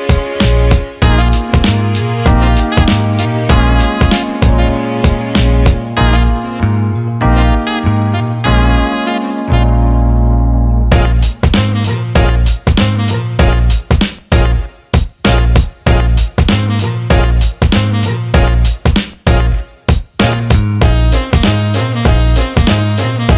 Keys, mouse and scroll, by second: 1.7 click, 3.8 click, 4.7 click, 6.1 alt+shift+middle click, 6.4 alt+middle click, 7.2 click, 11.7 click, 12.7-13.9 drag, 20.0-21.2 drag, 21.9 click.